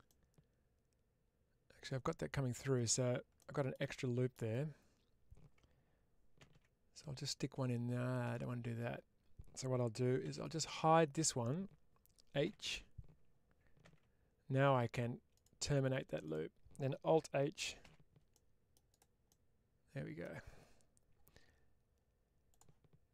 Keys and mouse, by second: 3.2 shift+middle click, 3.8 middle click, 10.1 3, 10.3 click, 12.3 h, 16.1 click, 17.7 alt+h, 18.2 middle click, 19.1 middle click, 22.4-23.1 drag.